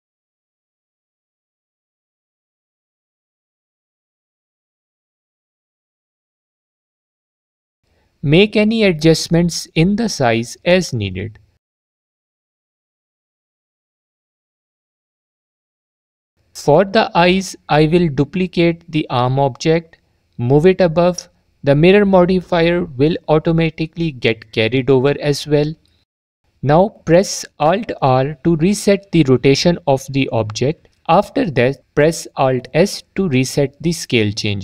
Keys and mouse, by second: 1.7 shift+d, 1.9-2.3 drag, 3.6 s, 4.0-4.3 alt+drag, 9.1 click, 13.8 click, 21.1 shift+d, 22.2-23.3 drag, 28.8 alt+r, 31.5 alt+s, 33.6 click.